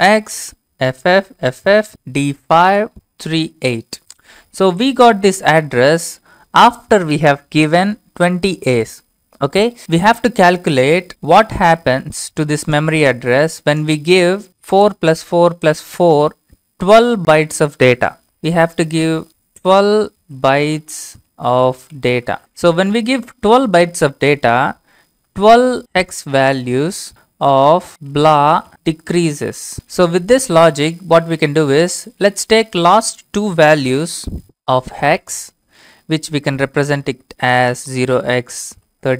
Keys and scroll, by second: 0.0-3.2 typing, 18.2 Return, 19.3-23.5 typing, 25.0-30.1 typing, 34.8 ctrl+c, 36.7-37.6 typing, 38.7 ctrl+v.